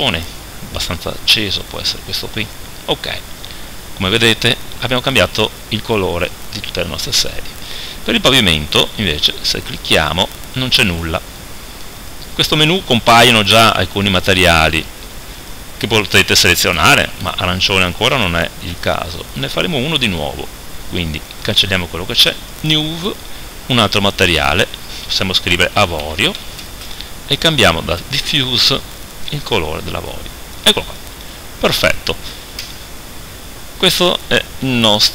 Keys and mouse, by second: 3.5 middle click, 7.4 middle click, 7.7-12.1 right drag, 12.1-17.0 drag, 21.3 click, 32.7 KP_0.